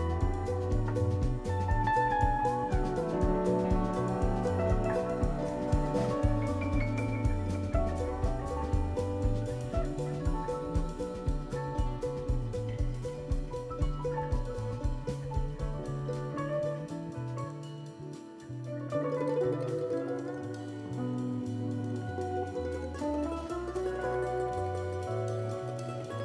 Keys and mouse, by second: 0.7 g, 3.9-8.6 drag, 9.0-11.5 drag, 12.0-14.6 drag, 16.6 click, 17.5 click, 18.4 click, 20.4 n, 22.5 click, 23.3 click, 23.7-24.5 shift+middle drag, 24.5 shift+click, 25.2 shift+click, 26.1 ctrl+p.